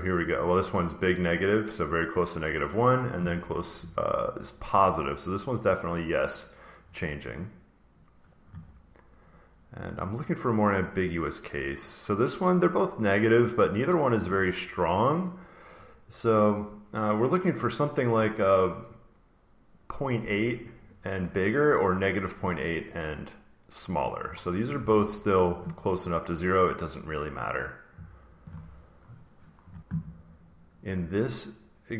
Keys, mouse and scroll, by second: 0.4 click, 0.9 click, 1.3 click, 1.6 click, 1.7 click, 2.8 click, 6.3 click, 7.9 click, 9.2 click, 9.8 click, 11.7 click, 12.5 click, 12.9 click, 13.4 click, 24.7 click, 25.1 click, 27.4 click, 29.0 click, 29.4 click.